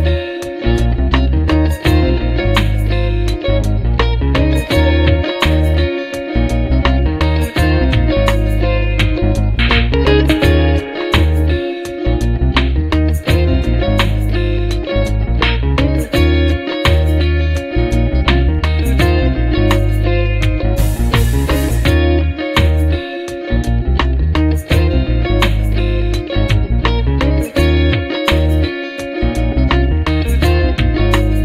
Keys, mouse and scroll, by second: 0.3 click, 1.7 click, 5.7 click, 10.7 click, 12.0 click, 13.4 click, 14.7-17.1 drag, 18.6-20.5 drag, 22.1 F1, 23.0 click, 24.1 click, 25.3 click, 25.9 click, 27.4 click, 28.9 click, 31.1 click.